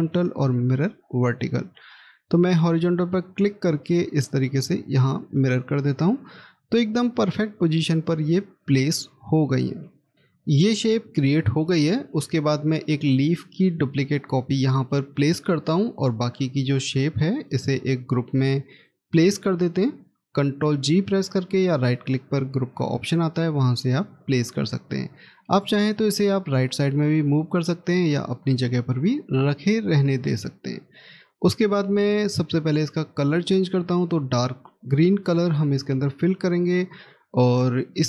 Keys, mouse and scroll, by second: 7.4-7.9 scroll up 1, 10.1-14.5 scroll down 1, 14.5 right click, 28.3 ctrl+z.